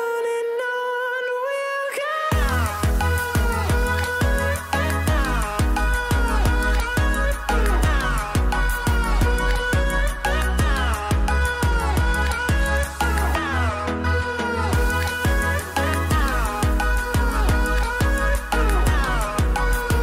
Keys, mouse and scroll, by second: 0.3 Delete, 3.6 F10, 4.6-9.2 drag, 11.4 ctrl+z, 13.0-15.2 drag, 19.5 scroll up 2.